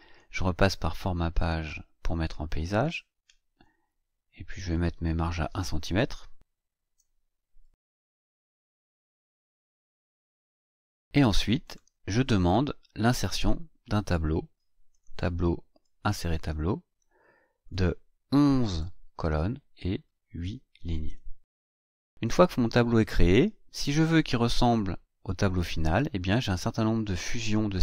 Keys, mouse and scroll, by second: 1.4 click, 2.7 click, 4.7 click, 6.3 BackSpace, 7.5 KP_1, 7.9 Tab, 8.3 KP_1, 8.5 Tab, 8.8 KP_1, 9.1 Tab, 9.4 KP_1, 11.6 click, 14.9 click, 15.8 click, 17.2 click, 18.5 KP_1, 20.0 click, 21.0 KP_8, 21.6 KP_Enter, 24.5 click.